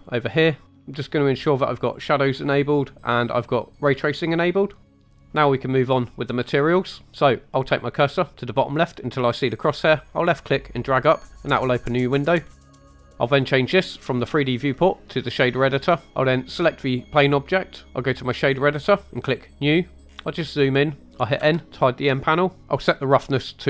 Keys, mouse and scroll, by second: 0.1 click, 1.8 click, 2.5 click, 3.9 click, 4.9 click, 10.1 click, 12.5 scroll down 3, 12.7 click, 14.2-15.6 drag, 20.1-20.6 scroll up 2, 20.6-23.6 middle drag.